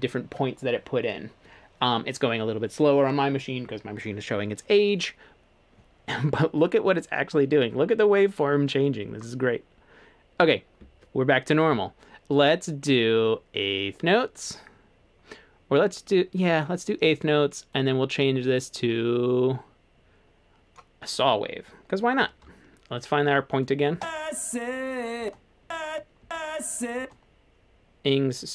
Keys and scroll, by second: 25.2-27.0 typing.